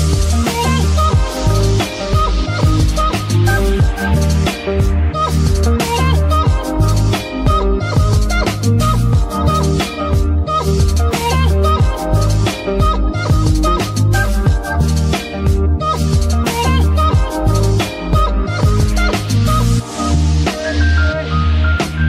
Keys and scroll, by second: 18.5 g, 18.6 y, 20.3 shift+g, 20.4 z.